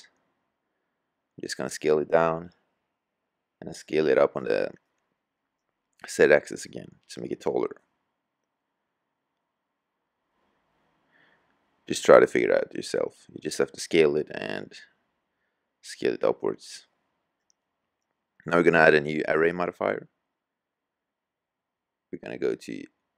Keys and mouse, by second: 2.2 middle click, 3.3-4.0 middle drag, 4.8 middle drag, 5.8-7.2 middle drag, 7.2 s, 9.3-9.7 drag, 9.7 s, 10.2-10.5 drag, 11.2 s, 13.0 click, 13.6-14.8 middle drag, 18.7 g, 21.4 g.